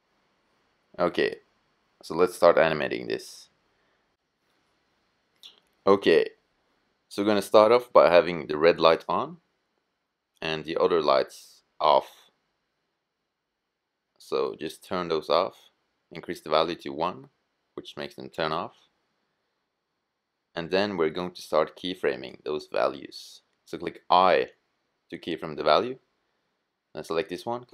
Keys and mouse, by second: 8.3-10.2 drag, 10.4-15.5 drag, 15.5-21.9 middle drag, 24.1 i, 25.7-27.0 drag, 27.0 i.